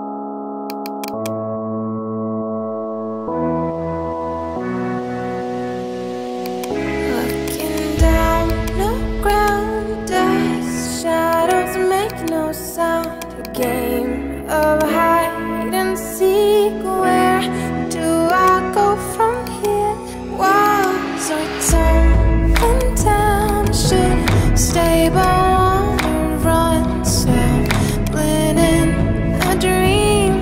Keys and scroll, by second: 25.7-27.0 typing, 29.8-30.4 typing.